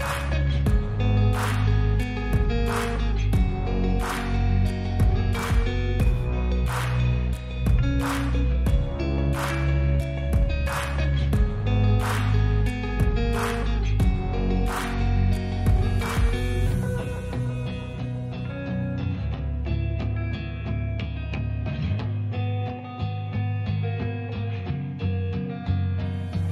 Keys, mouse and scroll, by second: 0.6 click, 2.1 e, 5.0 click, 5.6 click, 8.6 s, 9.1 click, 9.2 g, 9.6 middle click, 10.0 click, 10.4 ctrl+r, 11.5 click, 11.7 click, 12.6 g, 12.8 middle click, 13.1 click, 13.3 ctrl+z, 13.7 click, 14.2 drag, 14.6 g, 14.8 middle click, 15.1 click, 16.0 r, 16.4 click, 16.8 ctrl+z, 17.2 r, 17.5 click, 18.0 ctrl+z, 18.4 ctrl+r, 19.5 click, 20.2 Tab, 21.0 Tab, 21.5-22.6 drag, 23.0 s, 23.4 click, 23.7 click, 24.5 s, 25.5 click, 25.6 g, 25.9 middle click, 26.2 click.